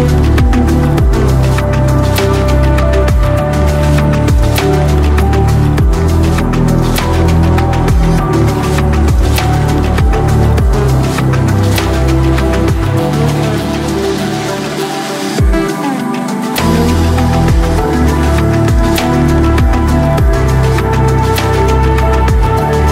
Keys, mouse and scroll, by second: 1.0 middle click, 1.4 middle click, 1.8 click, 4.1 middle click, 4.2 click, 6.4 middle click, 6.5 middle click, 7.0 click, 7.0 KP_8, 7.9 right click, 9.0 middle click, 10.7 right click, 11.0 middle click, 11.5 middle click, 11.8 click, 12.4 shift+click, 12.8 ctrl+middle click, 13.0 middle click, 13.1 alt+z, 13.3 shift+click, 13.6 middle click, 13.7 alt+shift+middle click, 14.2 middle click, 14.3 shift+click, 14.6 shift+middle click, 14.8 shift+click, 15.2 shift+click, 15.7 shift+click, 16.2 shift+click, 16.3 middle click, 16.4 shift+middle click, 16.8 shift+click, 16.9 shift+middle click, 17.1 shift+click, 17.3 middle click, 17.7 ctrl+alt+click, 18.0 ctrl+click, 18.4 ctrl+alt+click, 18.9 ctrl+click, 19.3 alt+2, 19.3 middle click, 19.4 alt+2, 19.6 shift+click, 20.2 shift+middle click, 20.6 middle click, 20.7 shift+click, 21.0 shift+middle click, 21.3 shift+middle click, 21.5 alt+z, 21.6 click.